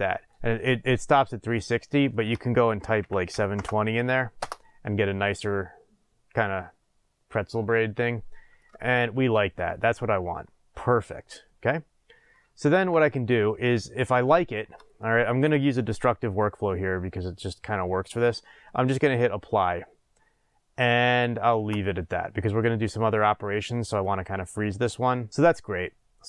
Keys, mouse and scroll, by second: 4.5 Return, 7.3-8.0 middle drag, 8.8 shift+middle click, 21.7 click, 23.7-26.2 middle drag.